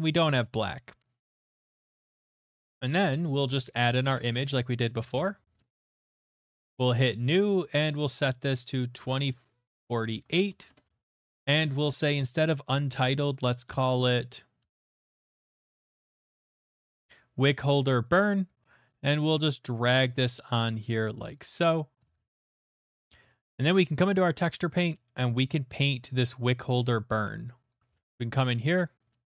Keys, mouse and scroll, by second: 1.7 click, 2.0 middle click, 2.8 click, 3.7 click, 3.9 click, 4.0-5.1 typing, 4.2 click, 5.6 Return, 6.3 click, 6.5 click, 6.8 click, 7.7 click, 8.6-11.4 typing, 11.4 Return, 15.1-16.7 typing, 15.7 click, 16.8 Return, 18.1-19.9 drag, 19.9 b, 21.3 click, 22.5 middle click, 22.6 middle click, 22.6 middle click, 22.8 shift+middle click, 24.0 shift+middle click, 24.9 click, 24.9 middle click, 25.3 middle click, 25.3 middle click, 26.6 shift+middle click, 27.7 right click, 28.2 alt+right click, 28.6 click, 29.0 click.